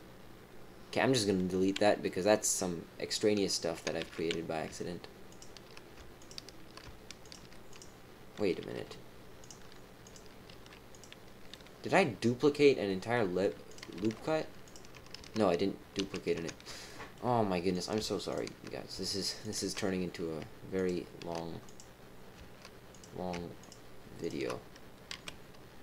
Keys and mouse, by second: 2.0-3.7 middle drag, 4.0 ctrl+z, 5.3 shift+click, 6.1 shift+click, 7.2 shift+click, 7.7 click, 8.7 g, 10.0 click, 10.5 g, 11.5 middle click, 12.5 click, 13.6 click, 13.9 g, 15.9 ctrl+z, 16.8 middle click, 17.7 click, 18.3 shift+click, 19.4 shift+click, 20.7 shift+click, 22.9 click, 23.6 shift+click, 24.2 shift+click, 25.1 x.